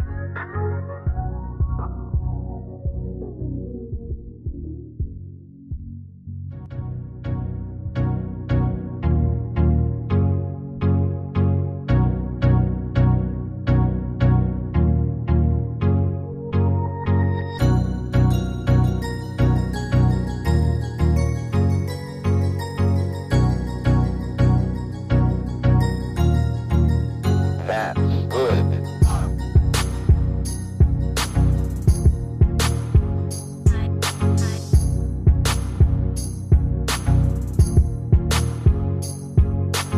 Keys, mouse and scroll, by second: 16.6-17.3 typing.